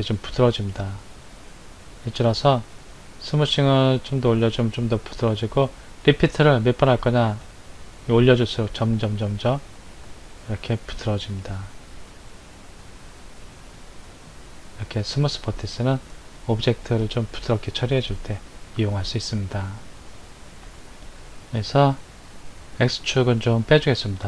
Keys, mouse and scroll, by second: 1.4-6.5 drag, 7.5-14.5 drag, 23.5 click.